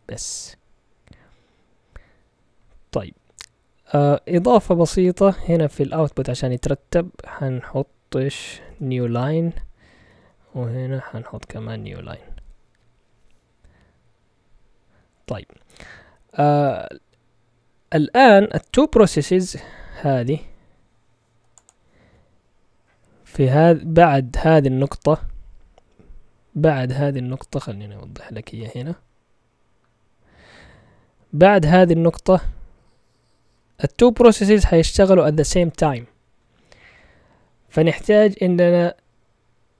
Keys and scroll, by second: 5.2 Right, 5.8-12.3 typing, 10.0 Up, 11.3 Left.